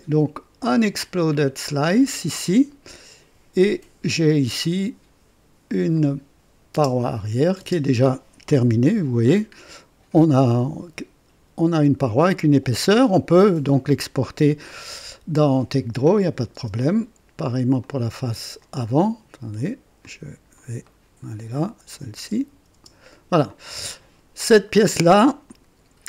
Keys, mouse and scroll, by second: 0.8 click, 1.3-1.6 scroll down 2, 5.9 click, 6.7 space, 7.5 space, 8.5 KP_3, 9.3-9.6 scroll up 2, 16.4 space, 16.5 space, 17.8 click, 18.6 click, 20.0-21.5 drag, 20.8 right click, 21.9 click, 22.1 space, 22.7 space, 23.4-25.0 drag, 25.4 click.